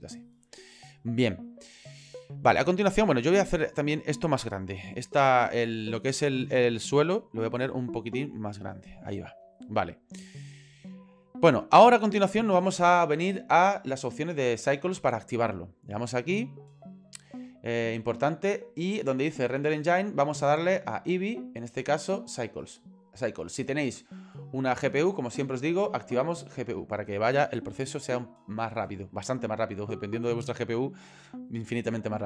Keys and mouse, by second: 0.7 ctrl+middle click, 1.5 middle click, 2.3 shift+middle click, 7.6 s, 9.8-11.3 middle drag, 16.4 click, 20.7-22.1 drag, 25.9 click.